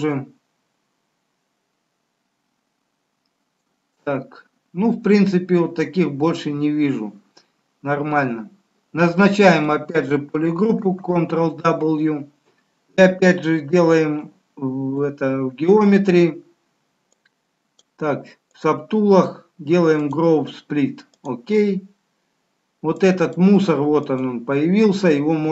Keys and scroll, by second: 10.8 ctrl+w.